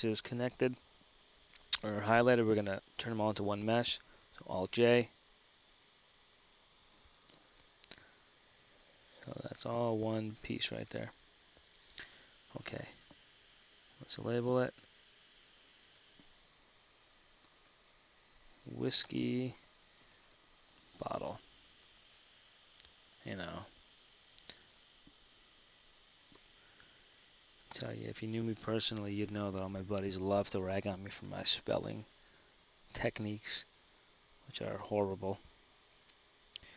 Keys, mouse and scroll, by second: 6.0 ctrl+j, 8.5 Tab, 11.7 Tab, 20.6 t, 25.0 BackSpace, 31.2 KP_1.